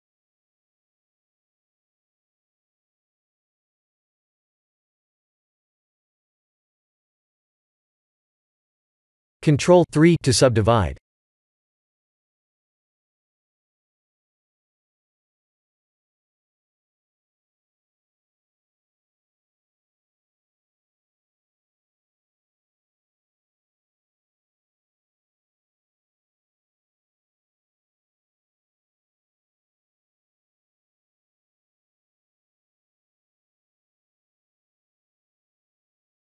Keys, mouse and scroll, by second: 1.4 scroll down 3, 2.7 scroll up 1, 2.9 shift+middle click, 3.7-4.1 scroll up 7, 4.5 shift+middle click, 4.8 shift+middle click, 6.4 shift+middle click, 6.9 shift+middle click, 7.1 shift+middle click, 7.6 shift+middle click, 8.1 shift+middle click, 8.6 shift+middle click, 9.3 click, 10.2 ctrl+3, 10.7 Tab, 11.7 ctrl+r, 14.8 shift+z, 16.1 ctrl+r, 17.3 Tab, 19.5 click, 21.3-22.0 scroll down 4, 22.0 shift+middle click, 23.9 shift+click, 28.1-28.8 scroll down 4, 28.8 click, 29.2 middle click, 29.7 middle click, 30.2 click, 31.9 click, 35.2-36.3 scroll down 1.